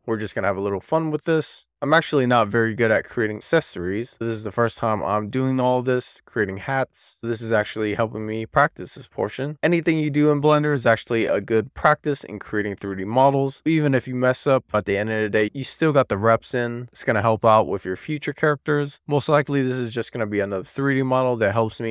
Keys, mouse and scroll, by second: 0.8 middle click, 1.7-2.4 scroll down 3, 2.4 middle click, 3.0 alt+z, 3.5 middle click, 4.2 alt+z, 4.6-11.0 middle drag, 12.9 middle click, 14.4 shift+middle click, 14.9 middle click.